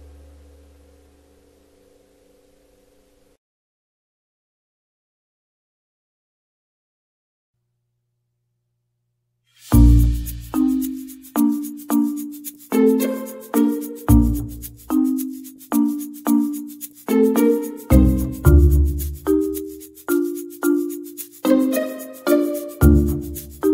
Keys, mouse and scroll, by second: 0.9 KP_0, 3.2-4.4 drag, 5.5 click, 6.2 KP_0, 6.8 Tab, 6.9 a, 7.5 KP_3, 7.9 r, 8.5 click, 8.9 click, 9.9 KP_0, 13.6 Tab.